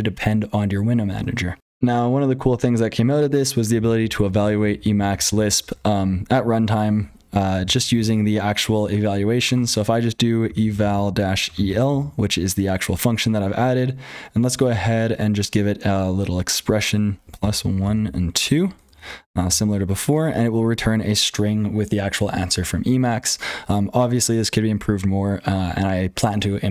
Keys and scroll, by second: 0.0-26.7 typing, 1.6 super+h, 1.6 F12, 7.5 ctrl+z, 19.4 Return.